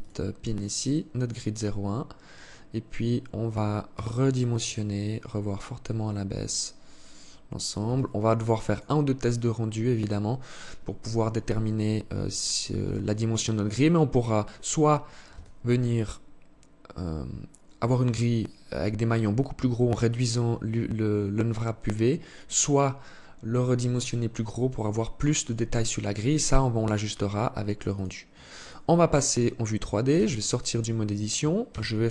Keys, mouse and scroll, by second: 27.9 click, 28.4 scroll down 2, 29.3 Tab, 30.9 ctrl+s.